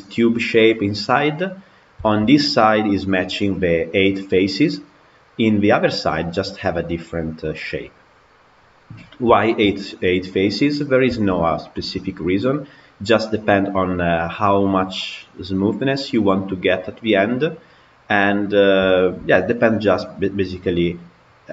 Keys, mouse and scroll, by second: 0.3-4.9 middle drag, 4.9 scroll down 2, 5.1-7.6 middle drag, 7.6 scroll down 3, 8.5-9.3 scroll down 1, 9.3-10.5 shift+middle drag, 10.5 click, 11.0-16.1 shift+middle drag, 17.1 middle click, 17.8-18.5 scroll up 1, 18.7-21.5 shift+middle drag.